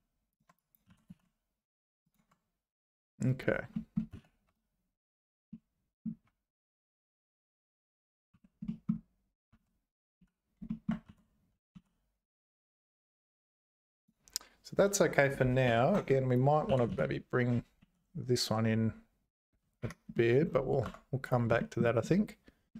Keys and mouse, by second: 0.6 click, 0.9 g, 3.2 click, 3.7 middle click, 4.1 z, 4.5 `, 5.5 middle click, 6.2 `, 8.3 3, 8.6 middle click, 9.5 `, 10.2 z, 10.7 shift+click, 11.1 g, 15.7 1, 16.0 click, 16.7 g, 20.1 middle click, 20.8 Tab, 21.6 shift+click, 22.7 middle click.